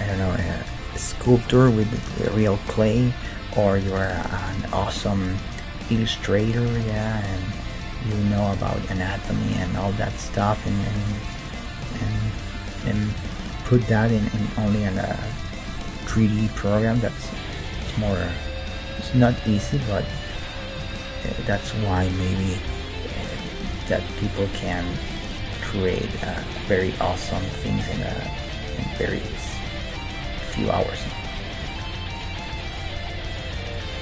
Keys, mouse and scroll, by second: 4.5-6.2 right drag, 4.8 g, 6.2-14.8 middle drag, 7.2-10.2 right drag, 9.1 g, 10.8-13.5 right drag, 14.2 KP_3, 16.5 r, 17.9-19.9 middle drag, 19.7 s, 22.7 r, 24.9 g, 26.5-28.8 middle drag, 27.4 Tab, 28.2 Tab, 28.8-33.0 right drag, 31.7 g, 33.7-34.0 right drag.